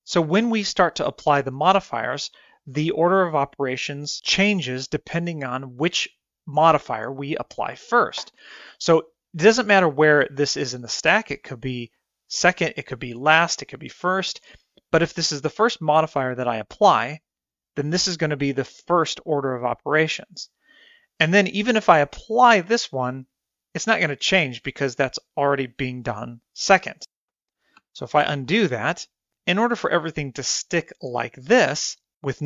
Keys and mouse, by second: 9.6-11.4 drag, 14.9-18.5 drag, 23.0-24.3 drag, 29.6 ctrl+z, 29.9 ctrl+z.